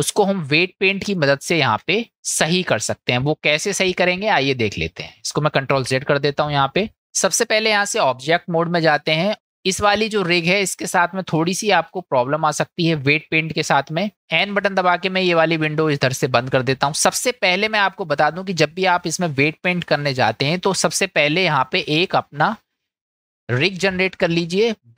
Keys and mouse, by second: 1.2-1.7 shift+drag, 4.2 click, 5.7 ctrl+z, 7.4-8.3 drag, 9.6 click, 11.4-11.9 shift+middle drag, 15.5 n, 19.9-20.6 middle drag, 22.7 shift+a.